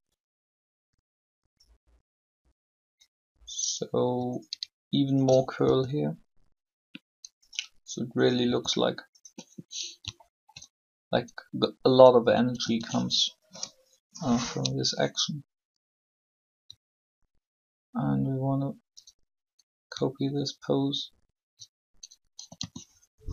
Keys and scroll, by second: 5.6 shift+r, 8.4 r, 12.5 a, 12.8 a, 22.3 shift+a, 22.5 shift+a.